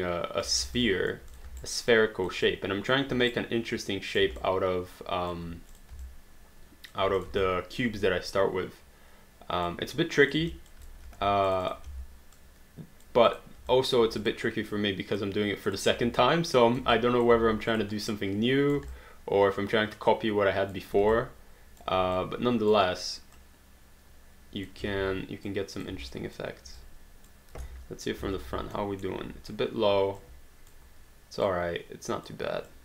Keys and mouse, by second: 0.6 alt+d, 0.8 alt+click, 1.6 alt+right click, 2.0 alt+click, 3.3 right click, 4.5 alt+click, 5.7 click, 6.0 alt+click, 7.2 click, 7.4 alt+click, 10.3 click, 10.5 alt+click, 11.0 q, 11.5 shift+click, 11.9 w, 13.3 click, 13.7 alt+click, 16.5 click, 16.9 alt+click, 17.3 alt+d, 17.7 click, 18.1 right click, 18.9 alt+click, 21.1 alt+click, 22.2 click, 23.4 click, 24.9 ctrl+z, 25.5 click, 26.1 alt+click, 27.7 space, 28.8 alt+middle click, 30.2 click, 31.5 click, 32.7 click.